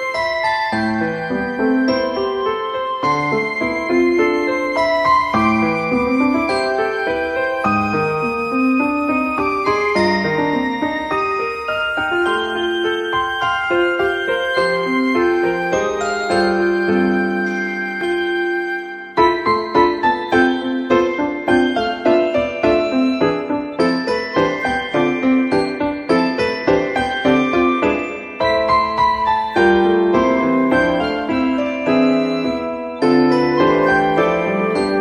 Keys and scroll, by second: 8.3 w, 11.9 l, 18.5 r, 26.0 g, 31.3 w.